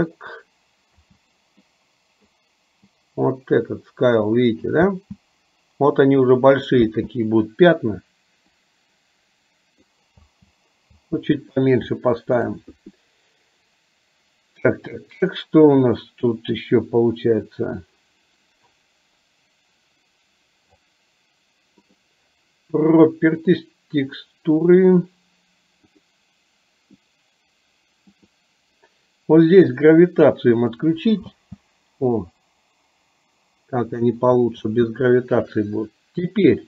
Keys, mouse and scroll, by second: 1.0 space, 1.8 click, 3.0-4.6 drag, 4.9 space, 6.9 space, 8.5-9.9 drag, 10.3 space, 11.0 space, 12.1 shift+middle click, 21.9 click, 26.0 click, 28.3 click, 30.0 click, 31.4 space, 34.6 space.